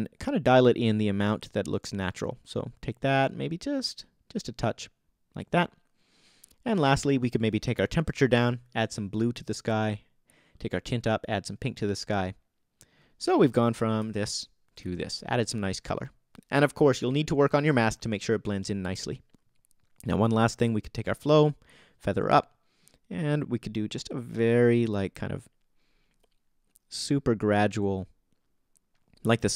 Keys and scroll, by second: 14.0 BackSpace, 14.7 super+BackSpace, 14.8 super+z.